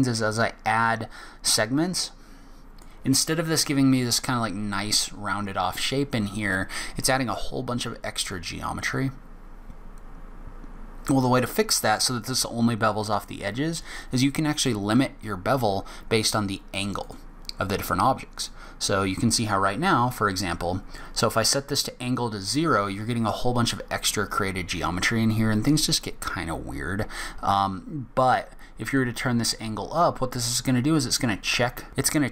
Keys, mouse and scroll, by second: 17.0 click, 18.5 click, 28.9 click.